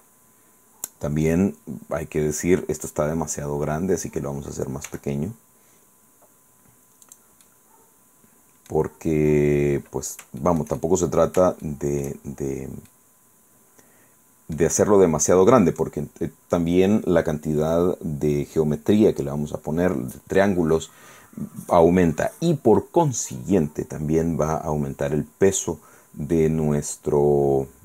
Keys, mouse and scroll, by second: 0.5-0.9 scroll up 2, 1.5-2.2 scroll down 4, 2.4-2.9 scroll up 4, 2.9-3.2 scroll down 2, 3.4-3.9 scroll up 2, 5.0 s, 7.2 click, 7.6-9.0 middle drag, 9.1-10.0 scroll up 3, 10.0 scroll down 2, 10.5-12.4 shift+middle drag, 12.4 shift+scroll down 2, 13.0-14.9 middle drag, 15.0-15.3 scroll up 1, 15.4 middle click, 26.0-26.4 scroll down 1, 26.4-27.8 middle drag.